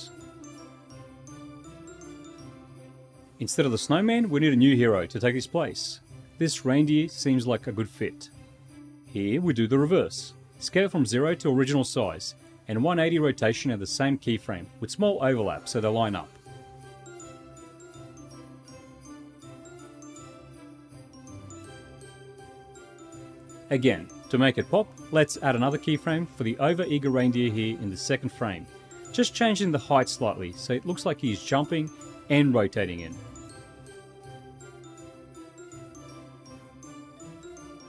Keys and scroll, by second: 4.8 w, 7.6 w.